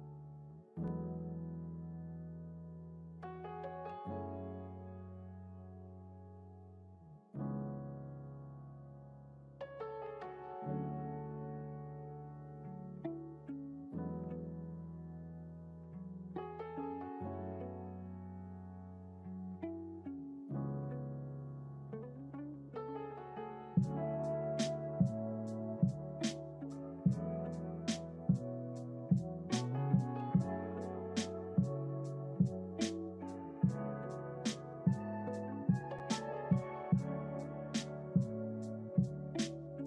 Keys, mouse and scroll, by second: 6.8 click, 7.7-9.2 scroll up 5, 9.2-10.7 drag, 20.4 click, 21.9 click, 24.4 click, 25.6-26.3 scroll up 2, 26.3-26.9 scroll down 2, 27.6-28.9 scroll up 2, 30.9 click, 34.0 click, 36.1 click, 38.0-39.8 drag.